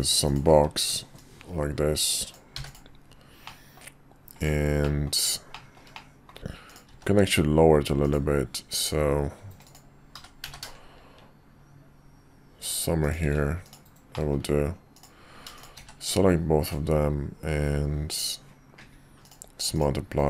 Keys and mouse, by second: 1.2-3.0 drag, 3.5 middle drag, 4.8 middle click, 5.5 shift+middle drag, 5.9 middle click, 6.7 click, 6.9 q, 10.1 g, 14.1 middle drag, 15.8 q, 19.7-20.1 drag, 20.1 KP_5.